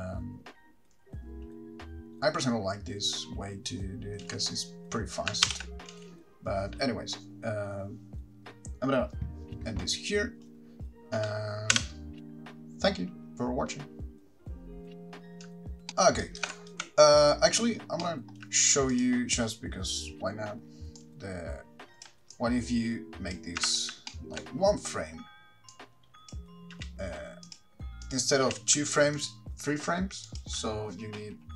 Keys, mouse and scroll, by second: 4.4 space, 5.7 shift+Left, 6.1 space, 12.0 n.